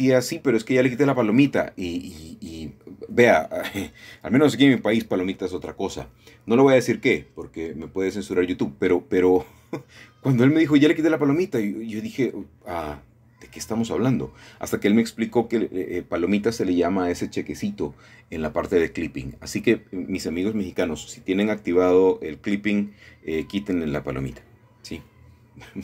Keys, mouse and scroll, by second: 3.6 shift+click, 4.3-4.9 scroll down 1, 5.2 middle click, 7.1 middle click, 8.0 middle click, 8.5-9.2 scroll up 1, 9.2-10.1 typing, 11.5 middle click, 12.5 alt+shift+click, 13.2 alt+shift+click, 13.2-14.0 typing, 16.3 Escape, 16.4 Escape, 17.1 ctrl+z, 18.5-20.0 alt+shift+drag, 20.3 typing, 24.7 shift+click, 25.5 typing.